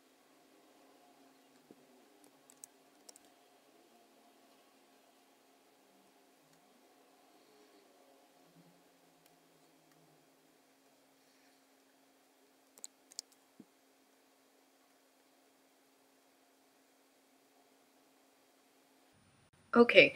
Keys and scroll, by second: 2.9 super+F9, 13.1 super+F9.